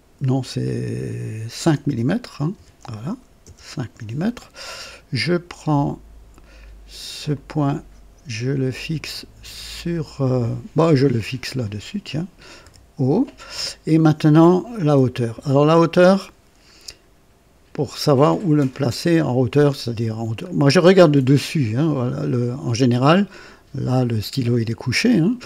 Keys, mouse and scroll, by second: 1.6 BackSpace, 2.5 KP_5, 3.4 Return, 7.3 click, 11.6 click, 12.6 o, 19.0-20.6 drag.